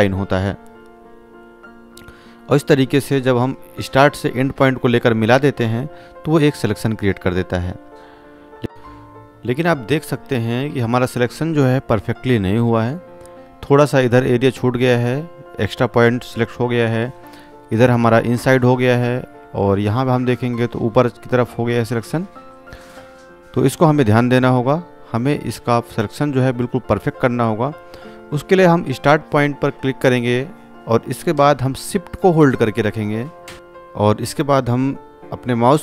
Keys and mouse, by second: 4.1 click, 5.9 space, 6.2-8.2 ctrl+drag, 15.3-16.8 drag, 24.7 ctrl+d, 27.5 click, 31.1 ctrl+space, 31.6 space, 31.7-32.3 click, 32.4 alt+click, 33.4 click.